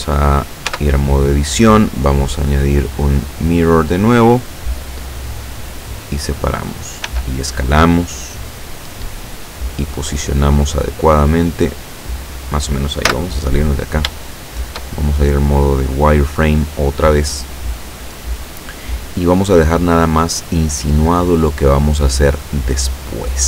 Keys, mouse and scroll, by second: 0.8 Tab, 2.3 click, 4.3 click, 5.4-6.6 drag, 7.1 s, 8.4 click, 9.0-10.0 drag, 10.4-11.0 scroll up 2, 11.4-12.7 drag, 13.1 z, 14.3 shift+middle click, 15.0-15.7 shift+scroll up 3, 15.7 middle click, 15.8-16.2 scroll down 2, 22.8-23.2 scroll down 2.